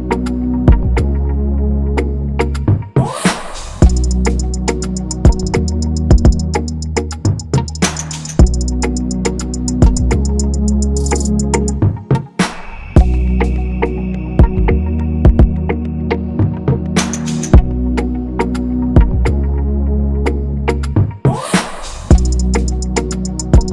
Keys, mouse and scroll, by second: 11.7 alt+Tab, 11.7-13.9 typing, 17.0-17.9 typing, 19.8 shift+click, 22.4-23.7 typing.